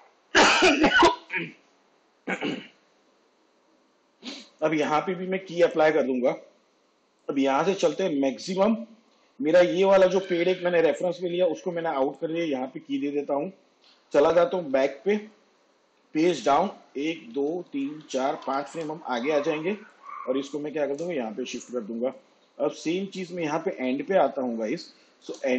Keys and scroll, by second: 14.7 j, 16.0 shift+Page_Down, 17.0 ctrl+Right.